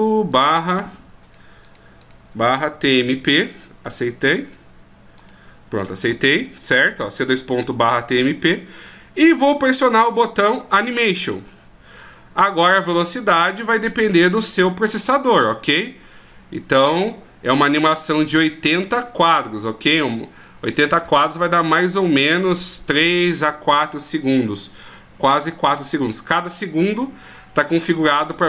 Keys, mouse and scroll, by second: 5.3 click, 6.4 scroll down 1, 8.5 scroll down 9, 10.2 scroll up 10, 11.4 click.